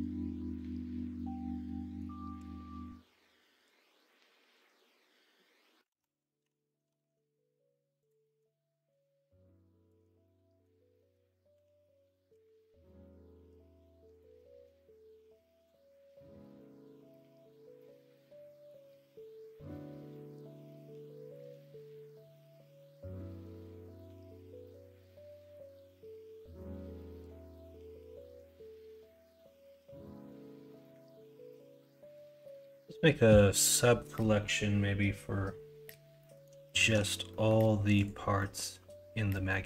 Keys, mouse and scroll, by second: 0.5 middle click, 1.2 middle click, 2.3 shift+d, 4.0 middle click, 4.4 middle click, 4.7 s, 5.9 ctrl+z, 6.4 o, 6.8 s, 8.2 middle click, 8.4-8.9 scroll down 1, 9.4 click, 10.0 middle click, 10.0-10.6 scroll up 2, 10.6-11.5 scroll down 4, 10.9 middle click, 11.5 r, 15.2 Tab, 15.9 middle click, 16.1 middle drag, 16.6 shift+middle drag, 17.2 middle click, 30.0 middle drag, 30.6 middle click, 36.2 middle click, 36.6 shift+middle drag, 37.3 middle click, 38.3 middle click, 39.4 middle click.